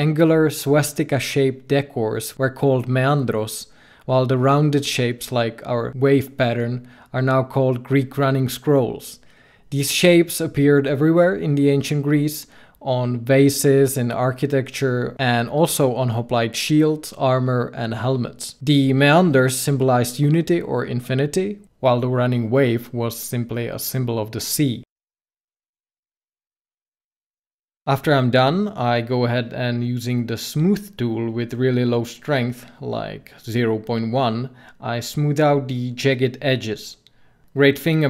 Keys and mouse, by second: 5.7-7.2 middle drag, 7.7 middle click, 8.5 ctrl+z, 9.4 ctrl+z, 13.1 ctrl+z, 15.8-18.4 drag, 23.8-26.8 drag, 27.3-28.4 drag, 28.9 f, 29.3-31.4 drag, 35.8 ctrl+z, 36.0 ctrl+z, 36.2 ctrl+z, 36.3 ctrl+z, 36.5 ctrl+z, 36.6 ctrl+z, 36.9 ctrl+z, 37.1 ctrl+z.